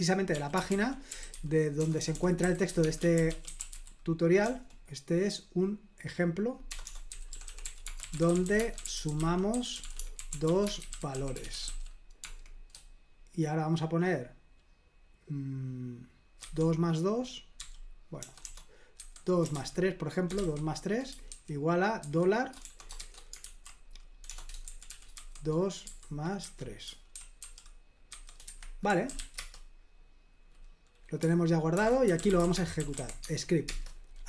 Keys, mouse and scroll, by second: 0.1-4.6 typing, 6.7-12.2 typing, 16.4 typing, 17.6-29.6 typing, 28.5 Escape, 31.7 super+h, 31.8-33.8 typing.